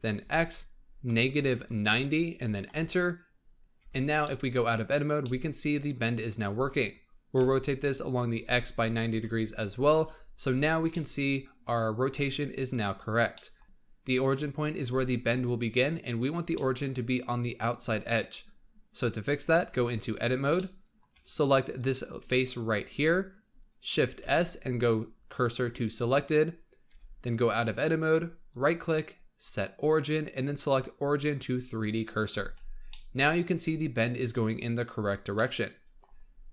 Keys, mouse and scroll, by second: 3.7 Tab, 4.2-7.3 middle drag, 7.3 r, 10.8-13.6 middle drag, 13.6-14.0 scroll up 2, 16.3 scroll down 1, 16.4-19.4 middle drag, 19.4 Tab, 20.0-20.5 scroll up 2, 20.5-21.5 shift+middle drag, 21.5 click, 22.1 click, 22.5 click, 24.1 shift+s, 26.8 Tab, 27.6 scroll down 2, 28.4-31.6 right drag, 32.6 scroll down 2, 32.8-35.7 middle drag, 35.7-36.5 scroll up 2.